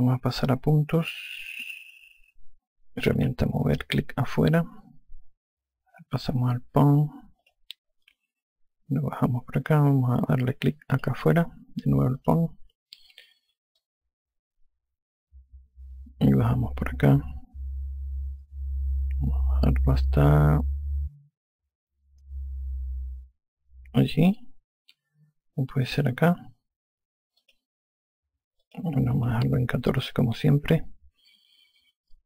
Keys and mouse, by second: 4.0 e, 4.5 click, 8.3 click, 11.8 click, 13.1 click, 14.7 click, 28.3 click, 29.5 click, 30.9 alt+click.